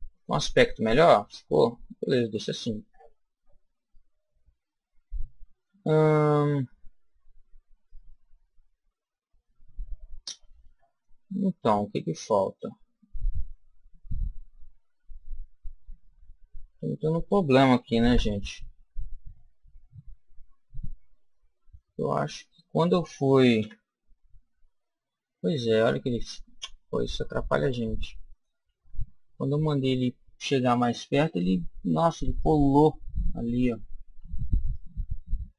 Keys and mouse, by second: 0.3-2.2 middle drag, 11.0-12.9 middle drag, 13.7-18.0 middle drag, 18.0 Tab, 18.7 Tab, 19.2 Tab, 19.8-20.9 middle drag, 22.0-24.6 middle drag, 23.6 KP_7, 26.3-29.1 middle drag, 32.3-34.0 right drag, 32.9 middle click, 33.4 click, 33.5 middle click, 33.6 click, 34.2 shift+middle click.